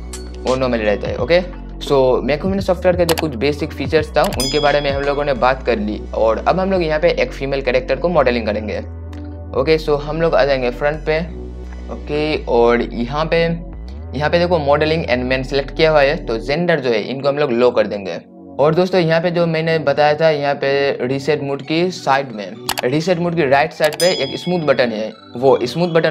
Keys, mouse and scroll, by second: 10.3-11.5 drag, 11.5 right click, 15.4 right click, 17.8 click.